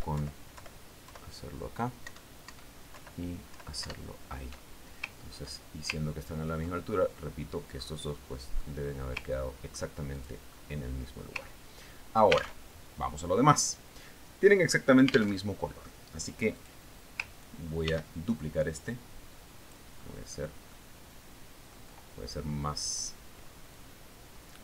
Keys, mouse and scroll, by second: 0.7 alt+Left, 3.6 alt+Up, 4.4 alt+Down, 5.3 alt+Up, 7.5-7.9 ctrl+scroll down 2, 7.9 ctrl+scroll up 2, 8.1 ctrl+middle click, 9.5-9.9 scroll up 2, 10.0-10.3 scroll up 2, 10.9-11.4 ctrl+scroll down 2, 11.6 ctrl+click, 12.0-12.7 ctrl+scroll up 3, 12.7 scroll down 2, 12.9-13.3 ctrl+scroll up 2, 13.4 ctrl+scroll down 2, 14.2 ctrl+alt+Tab, 16.8 alt+Tab, 18.1 click, 19.4 ctrl+d, 19.8-21.4 ctrl+drag, 21.5-22.1 ctrl+scroll up 1, 22.1-22.4 ctrl+scroll up 1, 22.4-24.6 ctrl+middle drag.